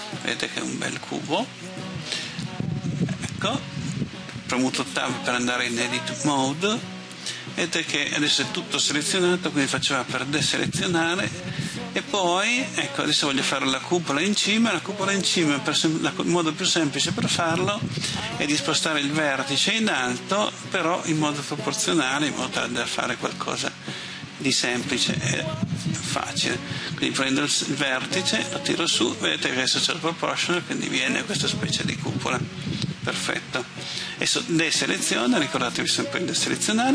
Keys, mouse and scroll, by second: 0.3-1.9 middle drag, 2.3 Tab, 9.6 a, 22.5 click, 25.9 right click, 28.5-32.3 drag, 34.7 a.